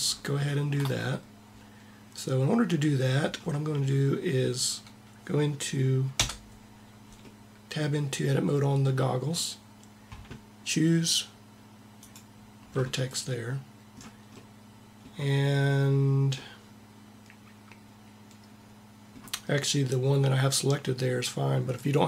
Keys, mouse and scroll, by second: 4.4-5.9 drag, 5.9 Tab, 11.8 click.